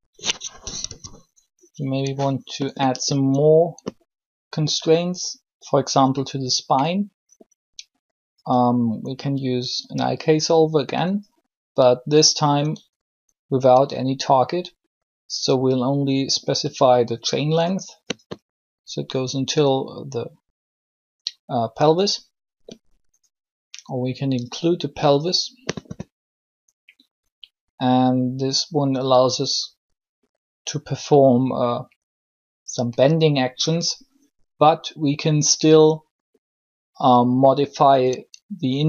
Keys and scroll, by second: 0.8 3.